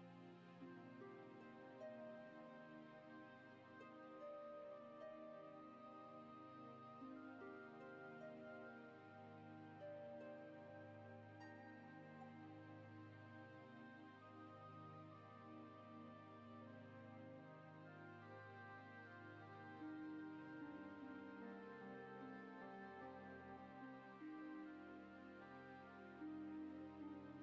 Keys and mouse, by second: 0.1 click, 1.3-3.6 drag, 4.4 shift+middle click, 4.8-8.1 drag, 8.9 click, 10.2 click, 11.7 click, 13.0 click, 13.6 click, 15.4 click, 16.8 click, 17.3 click, 17.8 click, 18.0 click, 18.2 click, 19.1 click, 19.3 click, 20.2 click, 20.4 click, 20.6 click, 20.7 click, 21.3 shift+middle click, 22.1 click, 22.6-23.9 drag.